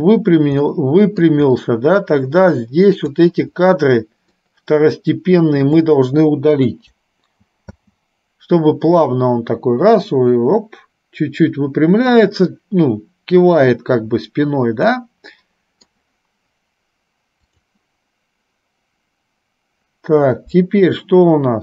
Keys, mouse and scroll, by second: 0.8 middle click, 2.6 click, 4.4-5.7 shift+drag, 6.8 Delete, 7.9 space, 15.2 middle click, 17.7 click.